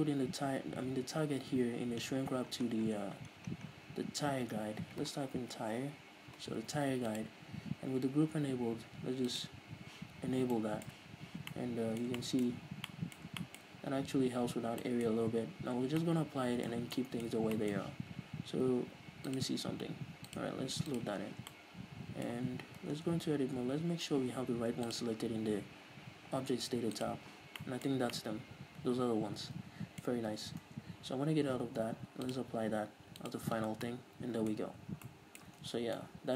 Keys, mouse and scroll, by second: 10.5-10.9 scroll up 2, 10.9-12.9 middle drag, 12.9-13.3 scroll up 2, 13.3-15.0 middle drag, 15.0 scroll down 2, 15.2 middle click, 15.5-16.2 scroll up 2, 16.2 scroll down 2, 16.4-19.7 middle drag, 17.2 scroll down 2, 17.6 scroll up 2, 19.7-21.9 drag, 21.9-25.2 middle drag, 23.5 Tab, 23.6-23.9 scroll down 2, 23.9 a, 24.4-25.2 scroll up 2, 25.2 scroll up 1, 25.2-28.0 drag, 28.0 middle click, 28.3 scroll up 2, 29.2-32.6 middle drag, 30.6 a, 31.1 Tab, 31.7-32.6 scroll down 2, 32.6 scroll down 1, 32.6-34.2 drag, 34.2 middle click, 35.1 scroll up 2, 35.4 middle click, 35.8 middle click, 36.1-36.3 middle drag, 36.1 scroll down 2.